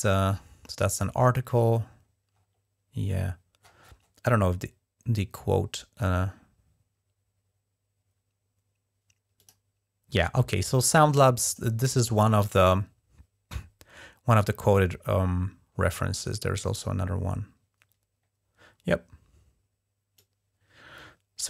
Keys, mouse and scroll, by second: 0.2-1.9 middle drag, 2.1-3.0 scroll up 1, 3.0-6.9 scroll down 4, 9.2-11.6 drag, 16.5-16.9 scroll down 1, 19.9-21.4 drag.